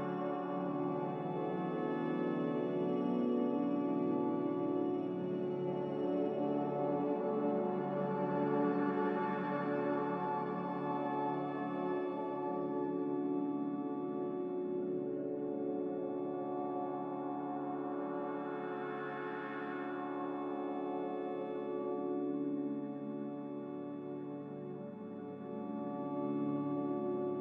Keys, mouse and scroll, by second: 6.0 ctrl+c, 6.2 ctrl+v, 11.6 ctrl+c, 11.7 ctrl+v, 14.0 ctrl+c, 14.1 ctrl+v, 18.1 ctrl+c, 18.3 ctrl+v, 21.5 a.